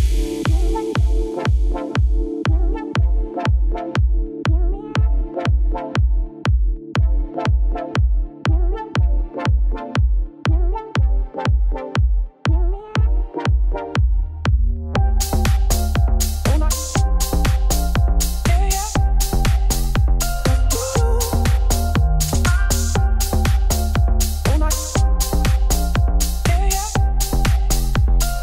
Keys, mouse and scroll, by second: 0.1 alt+click, 0.8 g, 2.6 middle click, 2.8 Tab, 3.2-3.7 scroll down 5, 3.7 shift+middle click, 3.9-4.2 scroll down 3, 4.2 scroll up 3, 4.4 middle click, 4.6-5.1 scroll down 6, 5.1-7.3 shift+middle drag, 7.3 click, 7.6-8.2 scroll down 3, 7.7 shift+middle click, 8.2 ctrl+s, 9.6 click, 9.8 shift+middle click, 10.0-10.6 scroll up 4, 10.6 shift+middle click, 10.9 Tab, 12.6 2, 13.8 KP_Divide, 14.0 middle click, 14.2 3, 14.6 shift+click, 14.7 x, 15.2 middle click, 16.2 shift+click, 16.3 x, 17.1 click, 18.1 shift+click, 19.0 u, 20.0 middle click, 20.6 a, 21.2 click, 22.3 u, 25.1 click, 25.5 KP_Divide, 26.0 scroll down 4, 26.2 middle click, 26.8-28.2 drag.